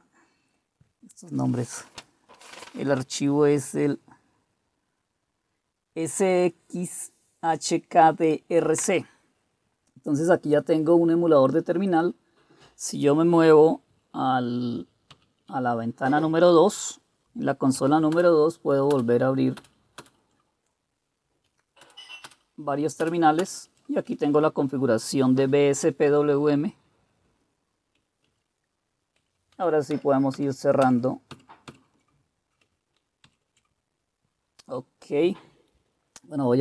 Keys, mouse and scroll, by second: 15.1 super+2, 18.2 super+Return, 18.9 super+Return, 19.6 super+Return, 20.0 super+Return, 21.8-23.0 super+Return, 23.4 super+Return, 28.2 super+w, 29.2 super+w, 29.5 super+w, 29.9 super+w, 30.8-31.3 super+w, 33.2 super+1.